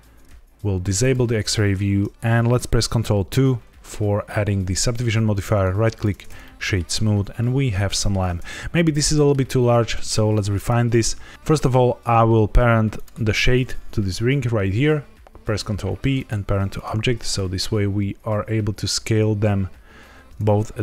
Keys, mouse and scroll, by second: 0.9 click, 3.0 ctrl+2, 5.5 right click, 6.4 middle click, 6.8 scroll down 1, 7.3 middle click, 9.0 middle click, 9.3-9.9 scroll down 1, 9.9 middle click, 10.3-11.3 scroll up 1, 11.3 ctrl+p, 11.3 click, 12.9 shift+click, 15.3 ctrl+p, 16.7 click, 17.3 s.